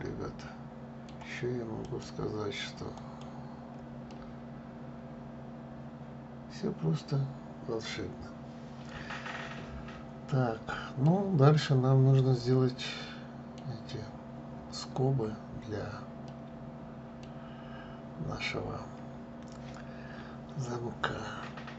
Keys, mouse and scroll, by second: 1.5-3.8 right drag, 3.8-6.8 middle drag, 12.6-15.6 middle drag, 15.9-18.9 middle drag.